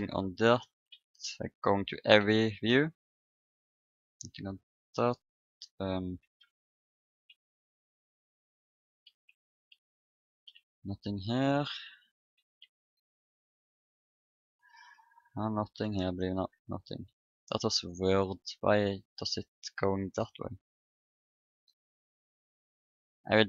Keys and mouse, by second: 0.3 KP_1, 0.8 KP_3, 2.1 p, 2.6 KP_1, 2.6 p, 4.0 KP_6, 7.6 shift+KP_3, 10.4 p, 12.3 shift+KP_1, 15.8 p, 16.1 p, 17.0 middle click, 18.5 Tab, 21.6 ctrl+r, 23.1 Tab.